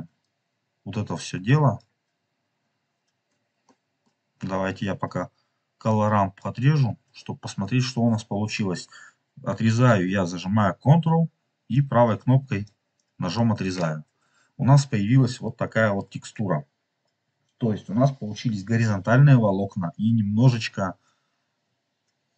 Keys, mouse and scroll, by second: 0.3-1.7 drag, 3.4 scroll down 2, 3.7 middle click, 5.8 ctrl+right click, 7.1 ctrl+right click, 7.2 scroll up 1, 11.6-12.6 ctrl+right drag, 13.2 ctrl+right click, 15.4 middle click, 19.9 scroll up 1.